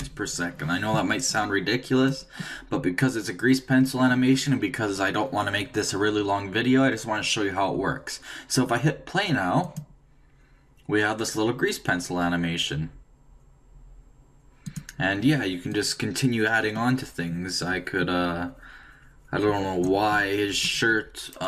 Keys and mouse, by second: 2.1-4.0 drag, 9.6-11.5 drag, 14.7-17.5 drag.